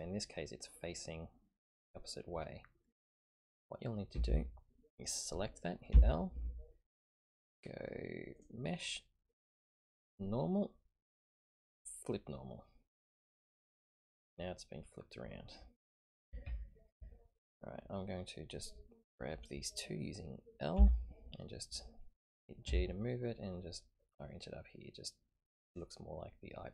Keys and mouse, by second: 0.2-3.4 middle drag, 0.3 click, 4.2 a, 4.3 a, 5.9 l, 8.3-13.4 drag, 9.7-12.7 middle drag, 16.4 ctrl+KP_3, 20.7 l, 22.6 g.